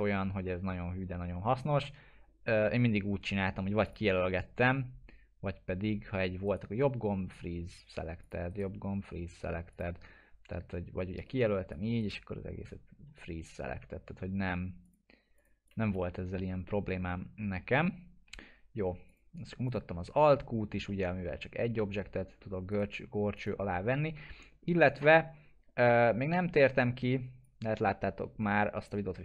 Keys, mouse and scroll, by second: 0.2-2.0 scroll up 1, 3.8 click, 6.4 right click, 8.2 click, 8.5 right click, 9.7 click, 12.0 right click, 14.8 click, 16.6 middle click, 16.9-17.7 scroll down 1, 17.8-18.4 alt+middle click, 19.1 click, 19.7 click, 20.2 alt+q, 20.9-22.4 alt+middle drag, 22.7 right click, 23.3 click, 24.1 scroll down 1, 24.9 middle click, 25.3-26.5 scroll down 1, 26.5-27.5 drag.